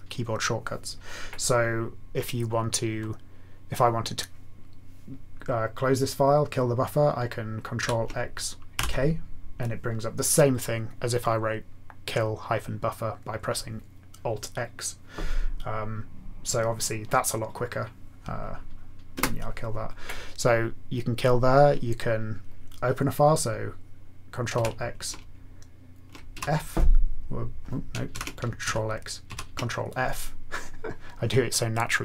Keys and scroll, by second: 7.8 ctrl+x, 8.7 k, 19.2 Return, 24.5 ctrl+x, 26.3 f, 28.1 ctrl+g, 28.6 ctrl+x, 29.3 ctrl+f.